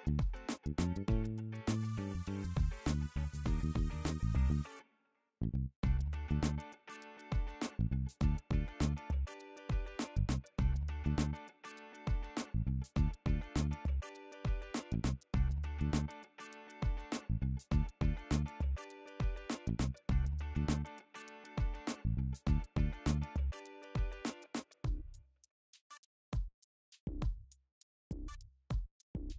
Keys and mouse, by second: 0.7 g, 3.9-4.9 middle drag, 4.9 click, 5.0-9.1 middle drag, 6.8 g, 9.1 right click, 9.2-10.5 middle drag, 10.5 click, 10.6-14.0 middle drag, 11.2 g, 14.0-16.1 right drag, 16.1-16.4 drag, 16.4-18.3 shift+middle drag, 17.8 g, 18.3-21.3 right drag, 18.6 g, 21.3 click, 24.6 middle click, 26.5 KP_1, 26.8 KP_3.